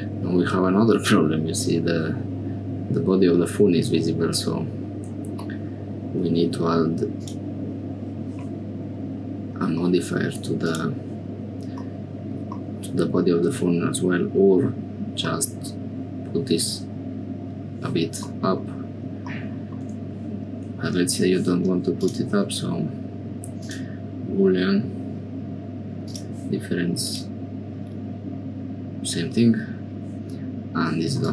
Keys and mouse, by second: 7.2 click, 9.8 middle click, 10.6 click, 11.8 middle click, 15.3 click, 18.3 click, 22.0-24.4 drag, 26.0 click, 31.2 click.